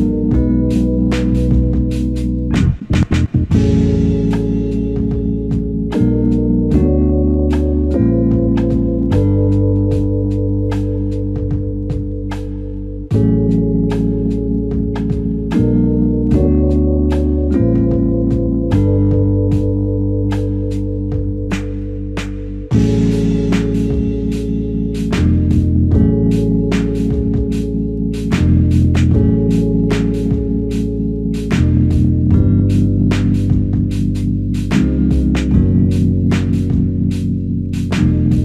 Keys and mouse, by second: 1.9 alt+click, 3.7 f, 4.6 double click, 9.6 double click, 10.8 alt+click, 12.8 double click, 17.0 f, 18.5 alt+shift+click, 19.2 ctrl+alt+click, 20.3 double click, 23.4 ctrl+alt+click, 24.0 alt+click, 26.4 alt+click, 27.9 double click, 28.6 double click, 28.7 alt+click, 30.8 double click, 31.5 alt+click, 33.3 ctrl+alt+click, 34.6 shift+click, 35.7 shift+click, 37.9 double click.